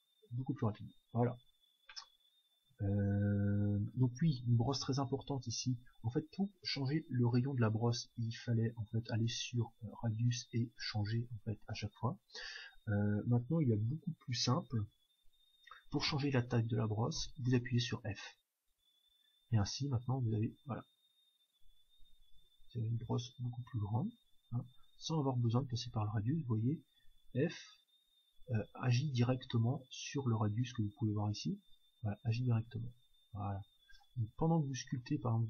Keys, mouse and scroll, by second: 0.9-3.7 middle drag, 4.9-8.1 middle drag, 6.4-8.2 drag, 9.2-12.7 drag, 17.1 f, 19.0-22.6 drag, 22.9-24.7 drag, 26.9 f, 32.9-34.8 drag, 34.1 middle click, 34.5 f, 34.8-35.4 middle drag.